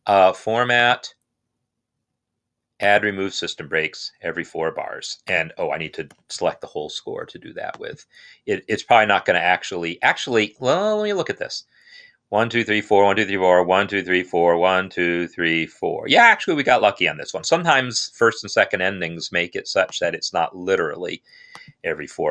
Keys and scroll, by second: 6.0 ctrl+a, 10.5 Escape.